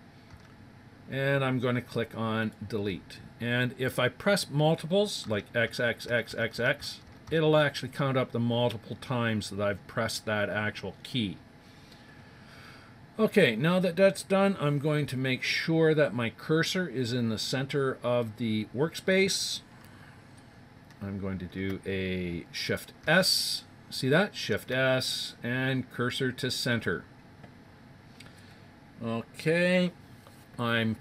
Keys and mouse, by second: 0.3 x, 5.2 x, 6.3 x, 6.7 x, 7.2 x, 23.0 shift+s.